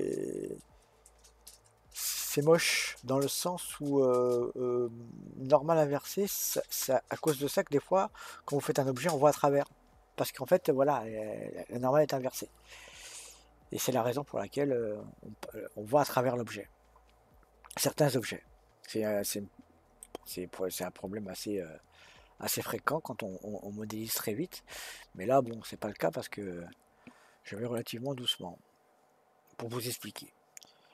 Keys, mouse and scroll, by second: 20.0-23.0 middle drag.